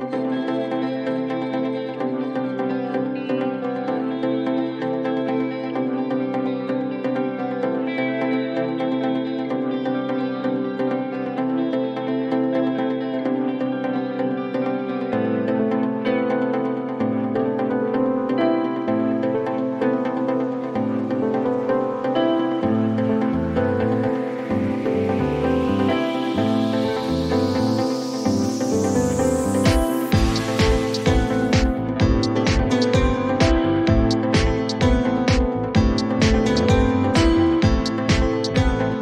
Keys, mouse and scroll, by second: 0.6 right click, 2.8 click, 4.1-4.8 typing, 5.0 ctrl+click, 6.0 ctrl+1, 8.3-10.6 drag, 13.1 click, 15.8 click, 16.0 click, 21.4 click, 21.6 click, 25.0 click, 26.4 click, 27.5 click, 29.9 click, 30.7 click, 31.2-33.0 typing, 35.0 click, 35.1 click, 37.7 click.